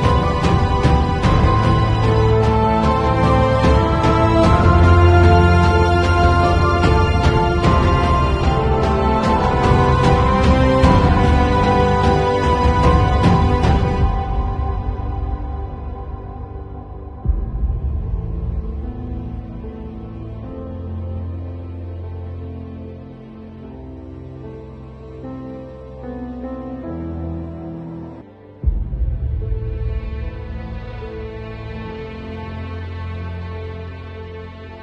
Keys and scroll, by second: 2.9 super+t, 8.5 space, 10.4 b, 10.7 0, 11.4 ], 13.5 x, 14.8 [, 16.8 ], 18.2 5, 18.5 [, 20.4 [, 21.7 ], 22.3 [, 22.9 2, 27.1 v, 33.5 space, 34.4 alt+super+z.